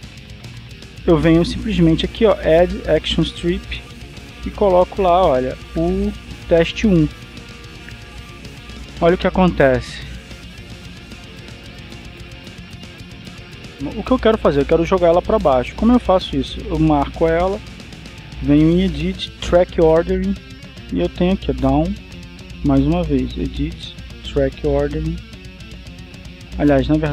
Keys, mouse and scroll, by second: 1.3 click, 2.8 click, 3.9 click, 4.9 BackSpace, 7.6 click, 10.4-16.0 drag, 19.1 click, 22.6 click, 24.2 click.